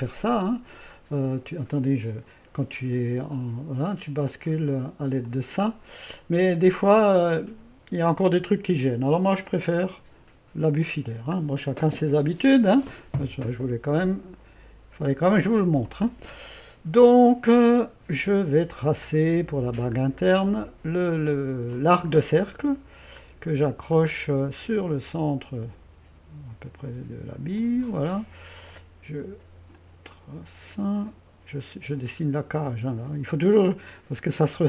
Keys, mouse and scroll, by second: 2.2 typing, 5.3 click, 6.3-7.1 typing, 6.6-9.1 drag, 9.9 typing, 11.1-14.2 scroll down 1, 19.2 click, 20.6 click, 21.8 click, 24.0 click, 27.6 click, 29.8 click, 33.8 click.